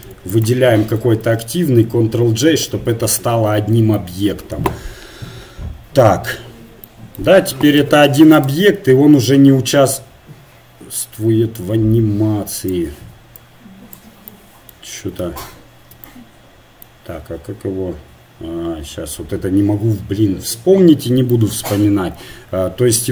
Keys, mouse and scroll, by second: 0.5 ctrl+j, 7.8 g, 9.3-11.1 drag, 13.3-15.4 drag, 15.4 ctrl+z, 21.9 KP_1.